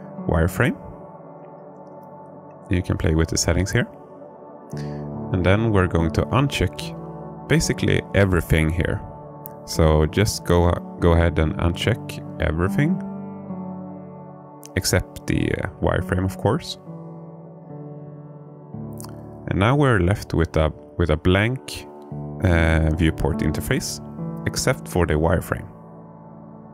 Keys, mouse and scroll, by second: 24.1-26.5 alt+middle drag.